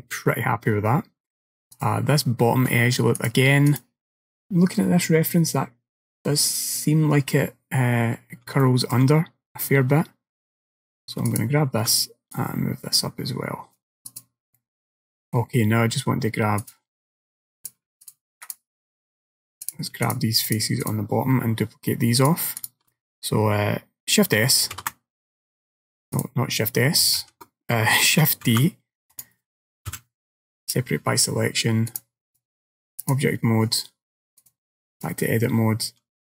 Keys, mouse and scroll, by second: 0.4 middle click, 1.8 click, 3.2 click, 4.8-6.2 scroll up 3, 8.0-8.7 scroll up 2, 8.7 alt+middle click, 9.7 middle click, 11.3 alt+click, 12.4 click, 14.1 click, 14.6 middle click, 16.7 click, 17.9 click, 18.1 shift+click, 18.5 click, 19.7 click, 20.1 shift+click, 20.5 shift+click, 20.9 shift+click, 22.2 click, 22.7 click, 24.8 shift+s, 27.3 ctrl+z, 28.5 shift+d, 30.0 p, 32.0 click, 34.5 click.